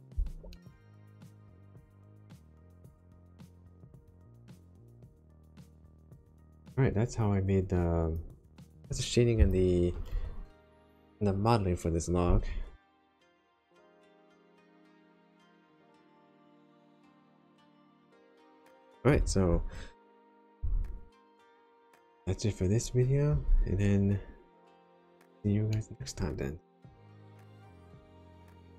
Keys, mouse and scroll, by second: 0.5 shift+middle click, 1.2 click, 2.2 Tab, 3.1 Tab, 3.6 Tab, 4.4 middle click, 6.6 click, 9.3 click, 13.4 middle click, 18.1 middle click, 24.7 click, 25.7 middle click.